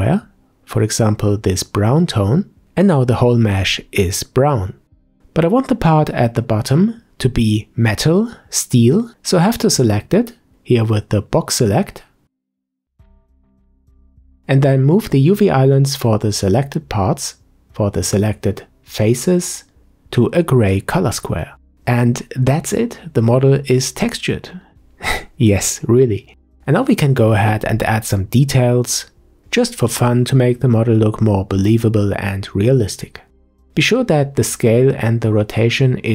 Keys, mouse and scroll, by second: 1.4 g, 2.8-5.4 shift+middle drag, 5.4-6.2 scroll up 4, 6.2 Tab, 7.2 Tab, 7.7-10.8 middle drag, 10.8 a, 10.9 a, 12.2 click, 12.5-13.2 scroll up 1, 13.2 click, 17.7 g, 22.9 scroll down 2, 23.1 Tab, 23.5-30.9 middle drag, 30.9 n.